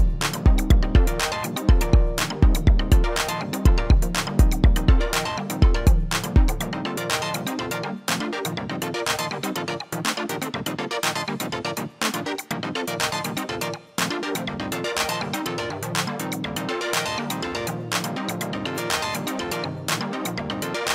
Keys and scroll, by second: 0.2-1.8 typing, 5.9-9.2 typing.